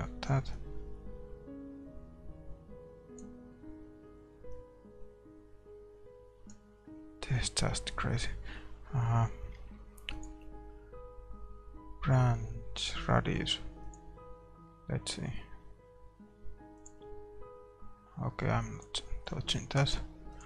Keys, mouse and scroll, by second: 1.0-2.6 drag, 5.0-6.5 drag, 7.6-14.0 middle drag, 17.2-20.4 drag.